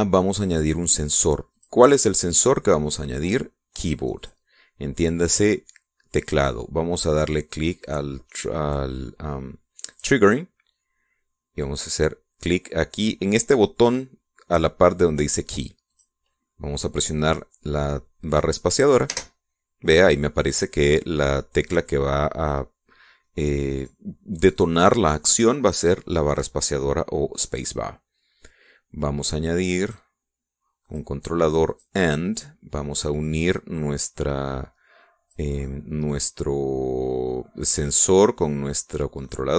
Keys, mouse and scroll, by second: 2.5 click, 5.1 click, 10.9 click, 16.9 click, 20.1 space, 24.7 click, 25.3 click, 29.6-31.1 drag, 31.8 click, 32.7 click, 34.0-36.5 drag, 36.6-39.5 middle drag.